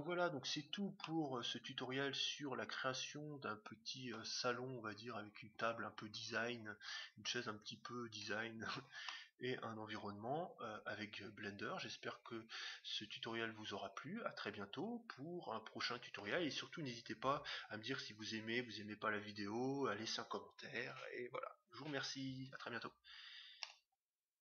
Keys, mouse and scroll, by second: 0.9-2.7 middle drag, 4.4-6.0 scroll up 1, 6.0-6.4 scroll up 1, 6.6-8.4 scroll down 1, 8.4-9.1 scroll down 1, 9.1-10.7 middle drag.